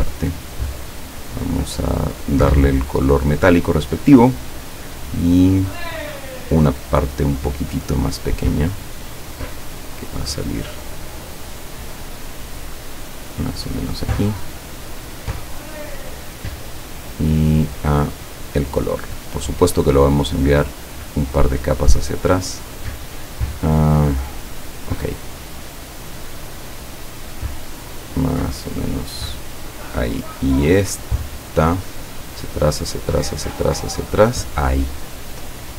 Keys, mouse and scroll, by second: 2.3 click, 2.9 click, 6.1 click, 10.4 click, 13.4 click, 14.1 click, 14.9 click, 16.0 click, 17.7 click, 18.3 click, 19.5 click, 20.5 click, 20.9 click, 21.3 click, 24.5 click, 25.0 click, 26.7 click, 27.7 click, 29.6 click, 30.4 click, 32.0 click, 32.4 click, 32.9 click, 33.3 click, 33.7 click.